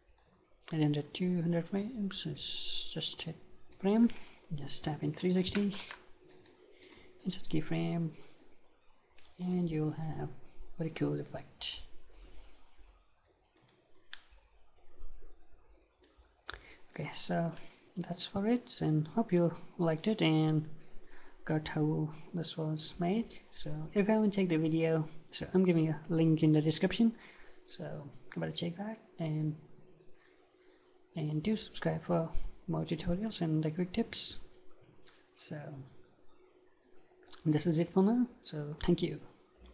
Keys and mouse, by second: 2.4-3.7 drag, 4.3-6.3 drag, 6.3-9.8 right drag.